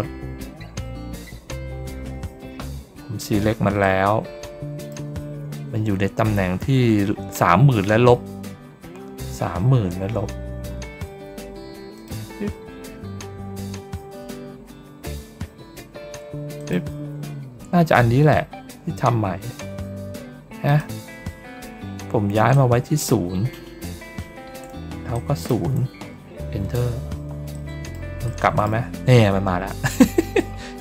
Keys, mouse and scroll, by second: 3.7-4.8 middle drag, 9.6 ctrl+scroll down 1, 10.6 ctrl+middle click, 10.9 ctrl+middle click, 11.8 click, 14.1 ctrl+middle click, 14.5 ctrl+middle click, 14.6 ctrl+middle click, 15.2 ctrl+middle click, 16.5 click, 20.5 click, 22.4 click, 25.0 click, 27.4 middle click, 28.1 middle click, 29.1-30.2 ctrl+scroll down 4, 30.7 ctrl+scroll down 1.